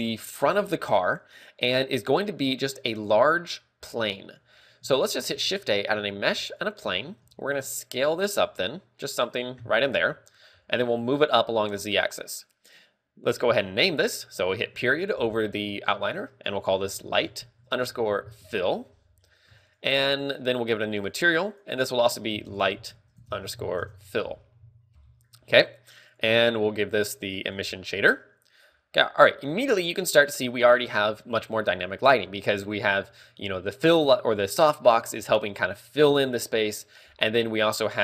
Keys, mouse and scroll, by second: 3.3 click, 5.3 a, 5.8 shift+a, 8.0 s, 9.7 click, 10.2 KP_3, 11.0 g, 12.6 click, 15.2 KP_Decimal, 16.4 ctrl+click, 19.9 ctrl+w, 21.4 click, 22.0 click, 26.5 click, 28.1 click.